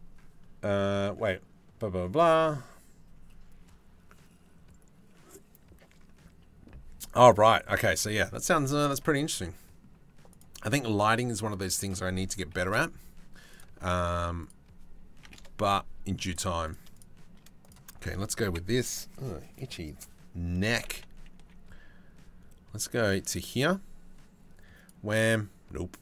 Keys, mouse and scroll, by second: 8.3 shift+middle click, 9.1 click, 10.0 click, 11.5 click, 14.1-15.1 drag, 16.3 click, 16.6 shift+click, 18.1 KP_7, 20.4 g, 24.4 click, 25.8 middle click.